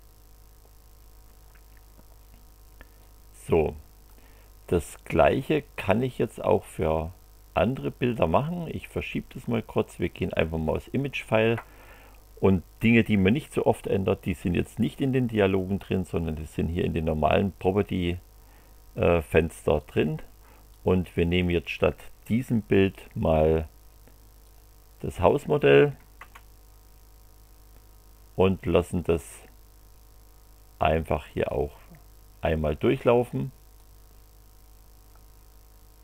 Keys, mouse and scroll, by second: 3.0 click, 5.3-7.0 drag, 7.6-9.3 drag, 10.0 click, 19.8 click, 20.7 click, 24.4 click, 26.2 Return, 31.4 click, 33.7-35.3 drag.